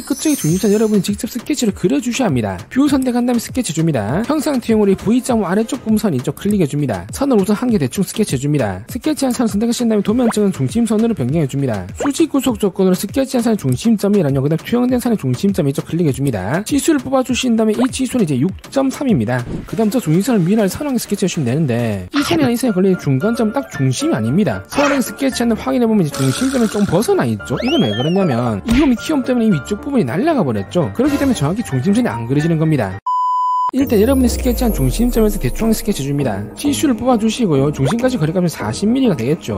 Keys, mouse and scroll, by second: 3.7 click, 5.2 scroll up 1, 5.6 middle click, 7.1 click, 7.2 1, 7.7 click, 9.5 click, 10.2 click, 11.9 click, 13.1 click, 14.8 click, 16.7 click, 17.1 click, 17.8 click, 18.7 3, 25.8 click, 26.6 scroll up 1, 27.3-27.8 scroll down 2, 27.5 middle click, 28.2 scroll up 1, 34.1 1, 36.1 click, 36.9 click, 37.8 click, 38.8 4.